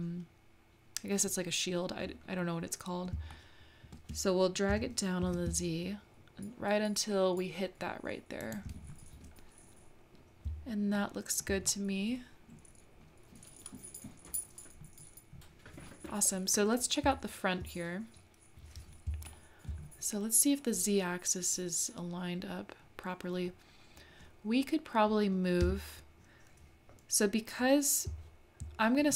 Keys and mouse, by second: 3.4 shift+middle click, 4.9 g, 11.0 shift+middle click, 19.3 shift+middle click, 19.9 click, 19.9 right click, 25.6 Tab, 28.1 `.